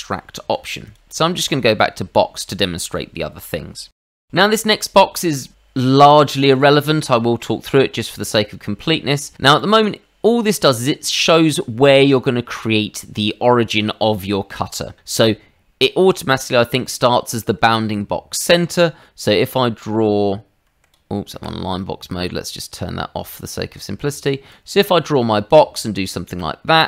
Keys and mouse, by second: 0.4 Escape, 0.8 click, 1.4 click, 4.2 ctrl+z, 7.1 shift+middle click, 7.8 middle click, 9.6 click, 17.8 Escape, 18.3 middle click, 19.2 click, 20.7 Escape, 21.3 Escape, 23.3 click, 24.5 click.